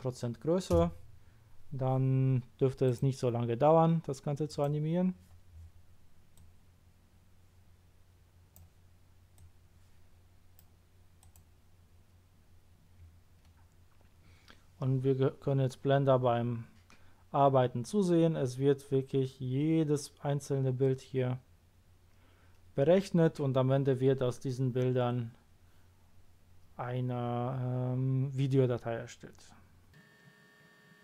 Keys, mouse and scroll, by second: 0.7 Return, 2.8 click, 4.4 click, 6.3 click, 9.3-10.5 drag, 11.2 click.